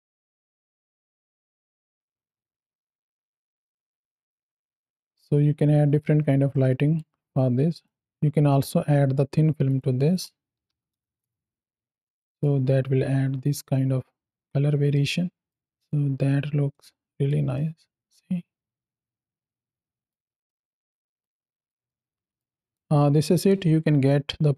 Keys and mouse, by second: 0.7 shift+click, 1.4 shift+click, 1.9 space, 6.4 click, 6.4 space, 7.6 click, 9.5 click, 10.0-11.2 drag, 10.9 KP_0, 12.0 shift+middle drag, 14.8-15.3 middle drag, 15.6 middle click, 16.6-17.1 middle drag, 17.4-20.0 middle drag, 20.3-21.0 middle drag, 21.7 ctrl+space, 21.7 ctrl+middle click, 22.5 ctrl+middle click, 23.4 space.